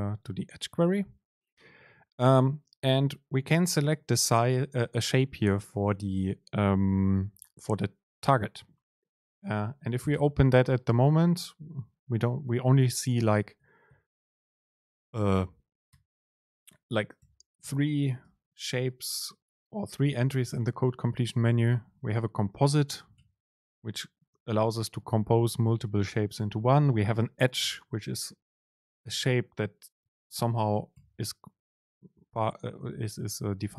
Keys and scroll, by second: 9.6 super+space, 17.3 BackSpace, 18.3 BackSpace, 18.3 super+space, 23.1 BackSpace, 24.4 BackSpace, 24.4 super+space, 31.0 BackSpace.